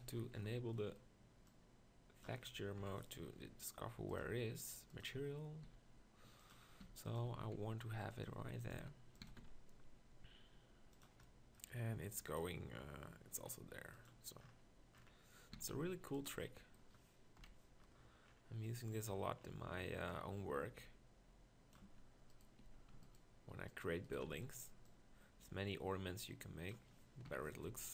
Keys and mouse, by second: 0.1 z, 2.8 KP_1, 5.7 s, 6.8-9.3 typing, 15.6 s, 16.3 click, 17.4 KP_1, 21.9 Tab, 22.3 right click, 22.7 z, 24.3 z, 27.3 KP_1, 27.6 z.